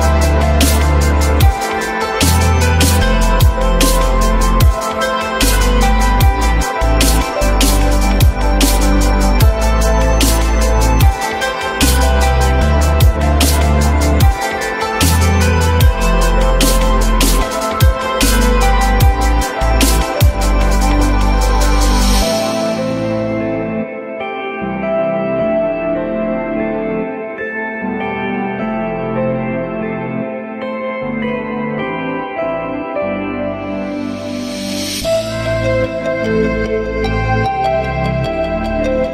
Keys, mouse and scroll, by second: 1.2 alt+F3, 2.0 F3, 2.2 alt+middle click, 2.8 alt+middle click, 3.0 F3, 3.5 alt+middle click, 4.0 F3, 8.5 shift+click, 36.4 alt+middle click, 37.7 alt+middle click, 38.1 alt+middle click, 38.4 alt+middle click.